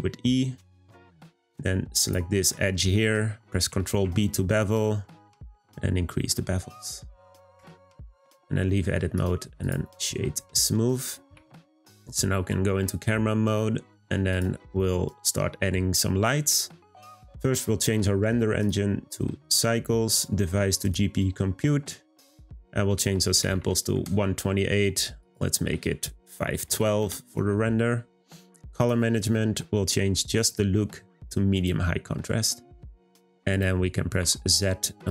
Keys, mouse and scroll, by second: 2.0 click, 2.5 middle click, 3.1-3.7 scroll down 2, 3.9 b, 7.6 Tab, 8.4 scroll down 3, 8.7 middle click, 8.9 scroll up 1, 9.1-10.3 right drag, 10.3-11.3 middle drag, 12.6-14.3 scroll up 1, 14.3 click, 17.0 click, 18.5-28.2 drag, 28.8-29.1 drag, 29.1 scroll down 2, 30.3-33.3 drag, 33.5 click.